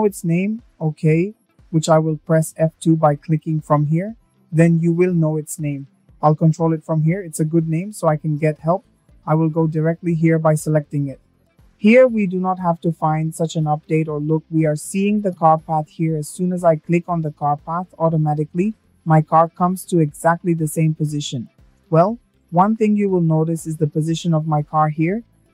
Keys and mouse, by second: 7.4 middle click, 7.9-8.3 shift+middle drag, 9.2 click, 10.9-15.3 drag, 16.6-17.2 shift+middle drag.